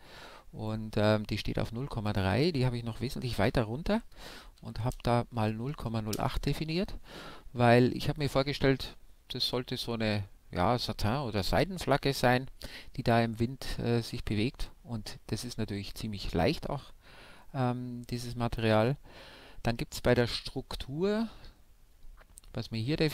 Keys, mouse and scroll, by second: 1.4-3.1 drag, 10.6-12.3 middle drag.